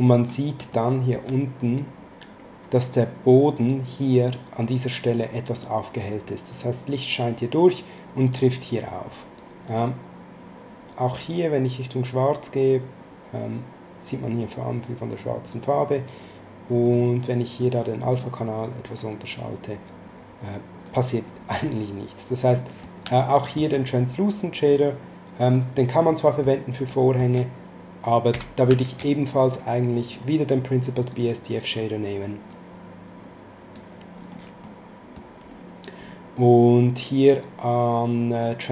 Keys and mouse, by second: 0.7 middle click, 9.6 click, 11.2 click, 16.8 click, 20.8 click, 22.5 middle click, 23.1 shift+middle click, 24.8 click, 26.1 middle click, 26.9 shift+middle click, 28.3 x, 28.8 shift+a, 31.0 click, 34.6 middle click, 38.6 click.